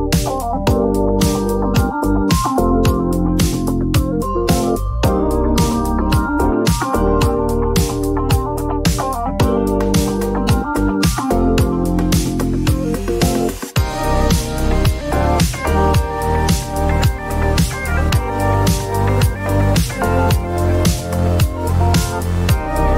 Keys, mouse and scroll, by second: 1.3 click, 3.2 right click, 5.4 click, 6.4-6.9 typing, 8.2 typing, 9.6 click, 9.7 click, 10.5-11.6 drag, 12.6 click, 14.0-16.5 typing, 15.3 click, 18.6-19.3 typing, 18.7 click, 18.8 click, 21.4 click, 21.4 typing, 22.5 Return.